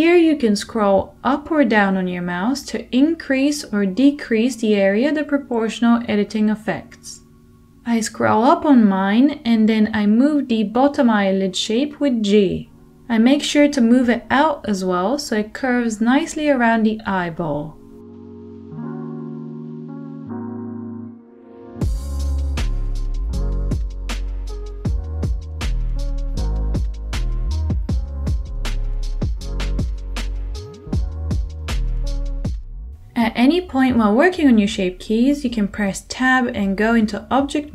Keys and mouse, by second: 5.6 g, 7.5-17.6 middle drag, 7.8 g, 12.6 g, 15.6 g, 17.6-18.6 drag, 18.6-24.8 middle drag, 20.4 g, 24.6 g, 24.8 click, 25.2-26.9 middle drag, 26.2 g, 26.7 click, 26.9-32.2 drag, 27.3 g, 28.5 g, 30.0 g, 31.1 g, 32.2 shift+middle click, 32.3 click, 32.4-33.7 middle drag, 32.6 g, 33.3 g, 33.7 click, 34.0 middle click, 34.0 g, 34.9-36.4 drag, 36.4 Tab, 36.4-37.7 middle drag.